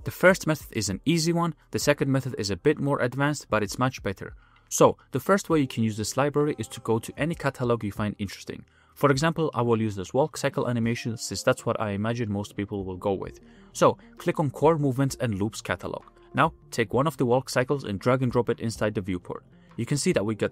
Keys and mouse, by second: 4.2-4.7 middle drag, 4.7 ctrl+z, 4.8-5.9 middle drag, 6.2 middle click, 8.3 click, 17.0-17.9 middle drag.